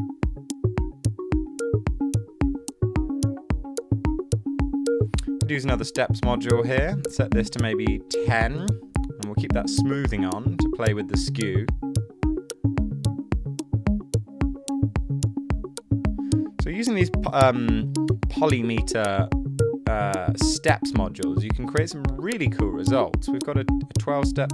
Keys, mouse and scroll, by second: 8.1-8.9 typing.